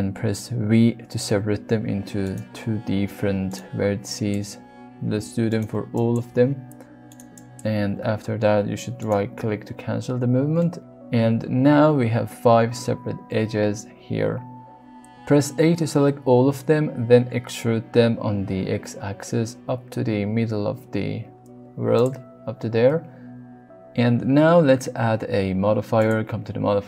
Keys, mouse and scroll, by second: 1.6 g, 2.2 right click, 2.9 g, 3.5 right click, 4.1 click, 5.1 v, 5.5 right click, 5.9 click, 6.2 v, 7.0 right click, 7.3 click, 7.7 v, 9.0 right click, 10.7 shift+middle click, 11.5 click, 15.2 a, 16.0-17.1 middle drag, 17.1 e, 18.2 x, 21.9 click, 25.9 click.